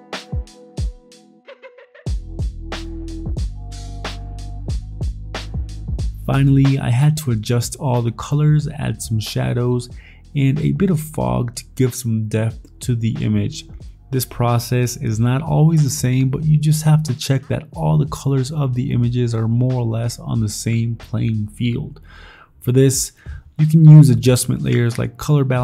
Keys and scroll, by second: 2.7 ctrl+t, 8.7-9.7 typing, 9.9 ctrl+i, 11.4 b, 14.0 v, 14.6 alt+Tab, 19.9 alt+Tab, 21.2 ctrl+t, 22.8 ctrl+j, 23.0 Right, 23.2 Up, 23.3 Left, 23.4 Right.